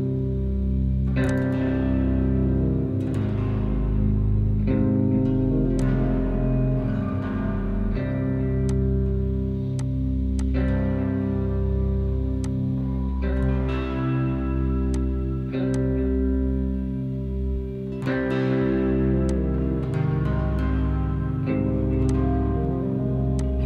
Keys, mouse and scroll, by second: 5.7-8.7 drag, 8.7 right click, 10.7 click, 11.6 Delete, 12.3-15.7 drag.